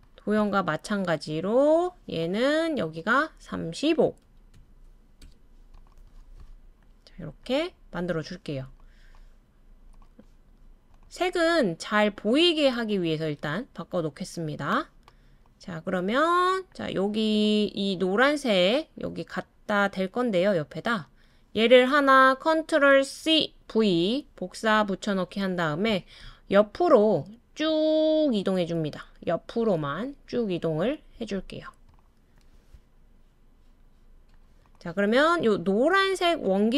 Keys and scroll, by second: 4.2-5.3 typing, 23.2 super+c, 23.7 super+v, 26.2-27.1 typing, 32.7 typing.